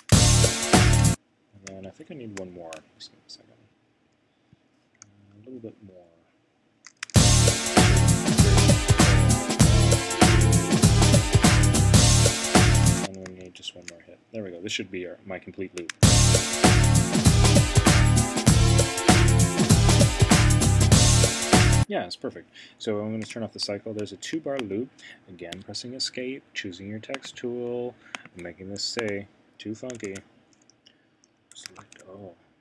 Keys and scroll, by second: 1.8 shift+Right, 5.9 shift+Right, 13.4 shift+Right, 23.3 c, 25.5 Escape, 30.0 super+a.